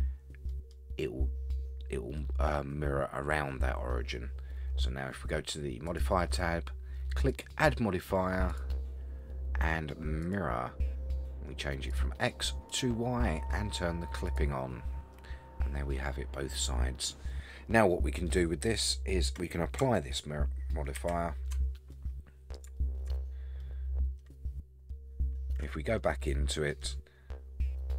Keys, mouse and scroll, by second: 0.5 middle click, 2.2-2.5 middle drag, 5.9 click, 7.3-7.7 drag, 8.5-10.4 drag, 11.9 click, 12.7-15.1 drag, 15.1-17.0 middle drag, 17.9-18.3 scroll up 2, 18.3-18.8 middle drag, 21.0 ctrl+a, 21.9-22.5 middle drag, 22.8-23.1 shift+middle drag, 23.3-23.6 scroll down 3, 23.6-24.9 middle drag, 25.0 scroll up 4, 25.6 Tab, 26.0 middle click, 27.8-27.9 scroll down 1.